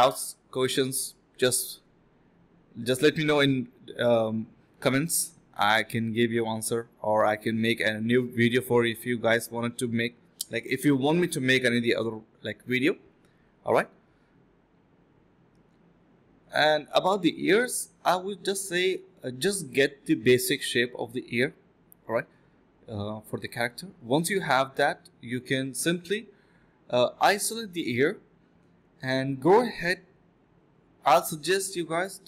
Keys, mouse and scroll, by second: 0.3 alt+click, 0.8 alt+click, 3.2 typing, 6.4 ctrl+b, 6.7 double click, 7.0 alt+click, 7.3 ctrl+b, 7.7 typing, 9.8 alt+click, 10.9 typing, 12.1 alt+click, 13.5-14.8 typing, 18.8 f, 19.6 ctrl+shift+click, 19.8 ctrl+z, 20.0 ctrl+shift+click, 22.8 ctrl+shift+x, 24.4 ctrl+shift+x, 24.6 ctrl+shift+x, 25.8 ctrl+shift+s, 26.5 ctrl+click, 29.7 ctrl+z, 29.9 ctrl+click.